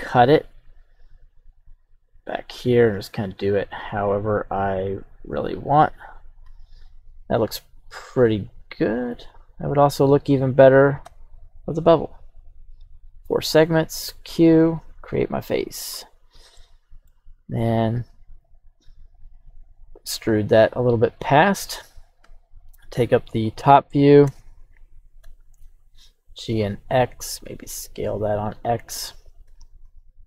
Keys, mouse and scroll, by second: 15.1 click, 16.5 middle click, 17.3-18.2 scroll down 1, 18.9 e, 20.5-22.0 drag, 22.2 KP_7, 22.8-23.5 scroll down 1, 24.2 l, 25.6 g, 25.6 x, 27.1 click, 27.4 x, 27.6 s, 29.0 click, 29.4 g, 29.8 x.